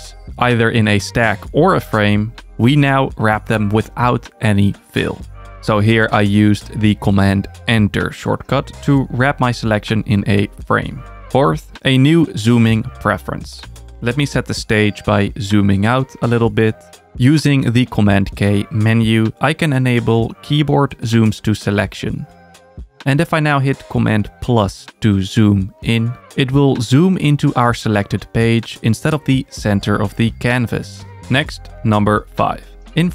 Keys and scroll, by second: 0.1 super+BackSpace, 3.2 super+Return, 9.8 super+-, 18.0 super+k, 26.8 super+=.